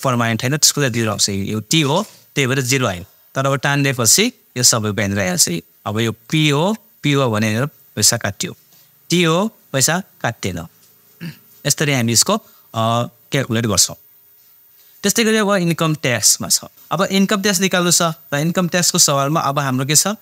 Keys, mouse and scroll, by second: 1.7-6.2 drag, 16.2 click.